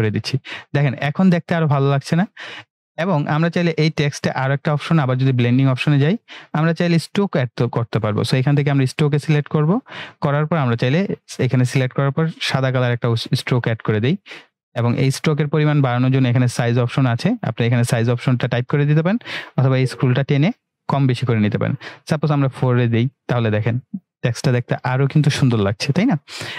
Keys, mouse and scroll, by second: 4.5 right click, 5.9 click, 9.0 click, 12.3-13.8 drag, 17.8 click.